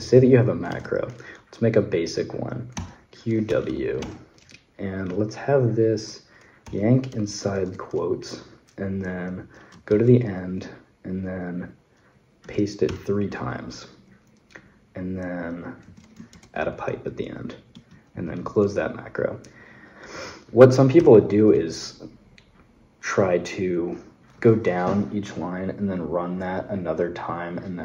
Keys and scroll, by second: 0.0-1.0 typing, 2.5-4.4 typing, 6.2-7.8 typing, 9.7 shift+4, 12.2 3, 12.7 p, 15.7 a, 16.1 shift+\, 17.5 Escape, 17.9 q, 19.9-21.3 typing.